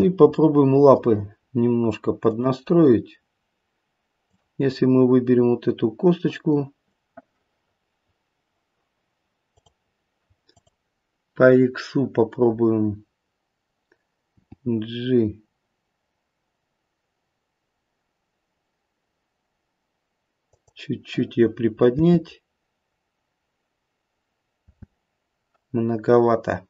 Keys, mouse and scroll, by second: 0.3 middle click, 2.2 click, 4.2 click, 9.5 click, 10.5 click, 14.3 g, 21.9 space, 24.6 space.